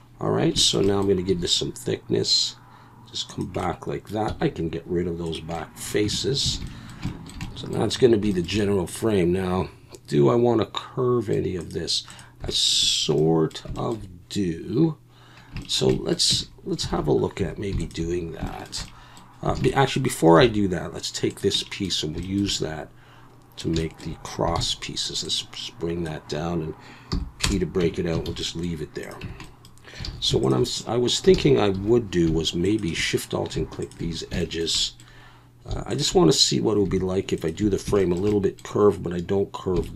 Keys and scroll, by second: 1.3 e, 4.3 x, 6.0 Tab, 6.5 alt+a, 16.3 Tab, 16.9 alt+a, 17.4 2, 19.5 alt+a, 20.4 3, 24.6 shift+d, 27.1 p, 27.8 Tab, 28.3 alt+a, 29.2 Tab, 30.0 alt+a, 31.3 alt+a, 31.7 2.